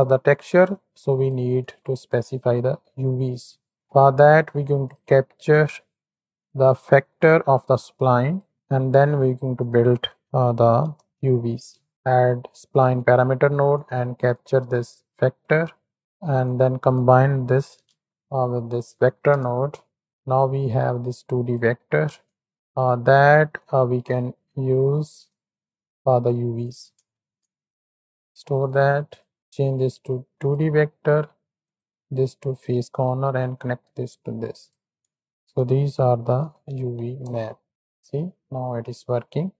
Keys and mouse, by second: 0.3-3.7 drag, 3.7 shift+a, 7.6 shift+d, 9.5 shift+a, 11.8 Down, 13.7-14.3 drag, 14.6 click, 16.6-20.1 drag, 20.7-21.6 drag, 22.5-24.8 drag, 25.2-26.6 drag, 27.1 shift+a, 29.2-30.5 drag, 31.6-32.6 drag, 33.5 click, 34.5-37.2 drag, 37.7 middle click.